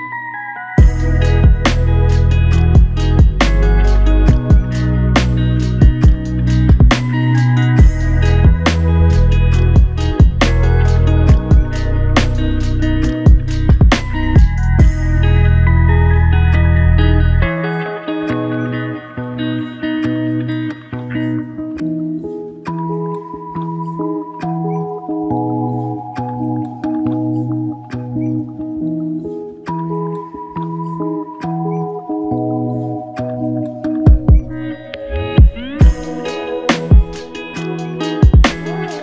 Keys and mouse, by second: 0.8 alt+click, 6.5 ctrl+click, 11.4 ctrl+click, 15.8 alt+click, 18.1 ctrl+z, 20.2 ctrl+click, 22.3 alt+click, 25.8 double click, 26.5 shift+click, 29.2 alt+click, 31.9 double click, 36.1 shift+click, 36.9 alt+click.